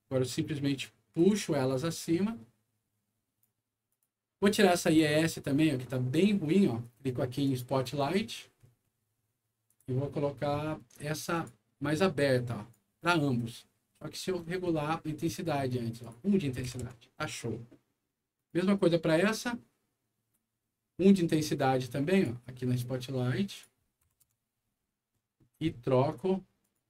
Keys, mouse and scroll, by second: 1.1-3.4 drag, 3.8 click, 5.0 click, 7.4 click, 8.0 scroll down 1, 8.6 scroll down 2, 9.6 click, 10.2 scroll up 2, 11.3 click, 12.1 right click, 13.7-15.4 scroll up 9, 16.0 click, 16.6 KP_1, 16.8 Return, 18.3 click, 20.4 scroll up 1, 21.1 scroll down 2, 22.1 click, 23.5 click, 24.0 KP_1, 24.2 Return, 24.8-25.6 scroll down 3, 26.6 click.